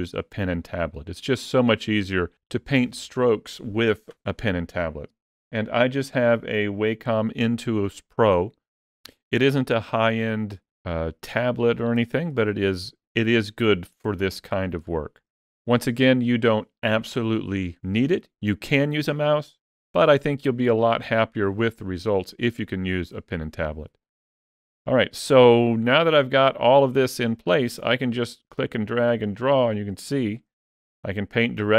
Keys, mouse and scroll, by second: 10.1 ctrl+middle click, 12.2 shift+middle click, 13.2 ctrl+middle click, 14.5 shift+middle click, 28.6 click.